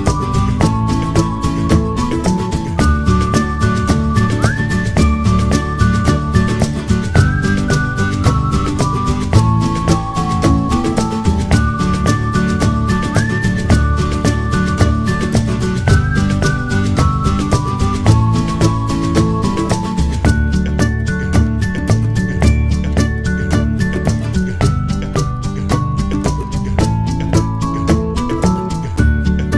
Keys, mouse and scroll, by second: 11.5 click, 14.6 click.